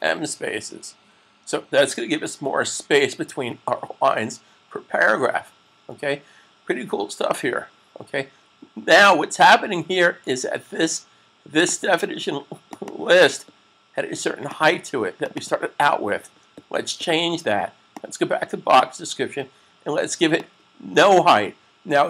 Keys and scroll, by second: 2.0 s.